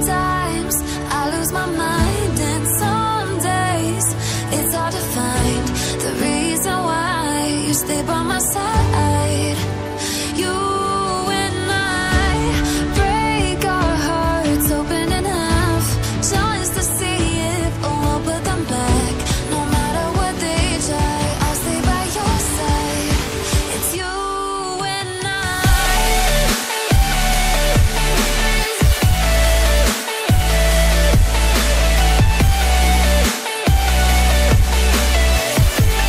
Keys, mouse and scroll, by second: 7.2 double click, 7.6 click, 9.7 shift+click, 11.5 Delete, 12.0 click, 13.5 click, 14.3 ctrl+z, 14.6 click, 16.4 click, 18.2 ctrl+c, 18.4 ctrl+v, 19.8 click, 23.7 click, 24.8 click, 25.2 double click, 26.4 click, 27.8-28.6 scroll up 1, 28.6 click, 31.4 click, 34.6 ctrl+z.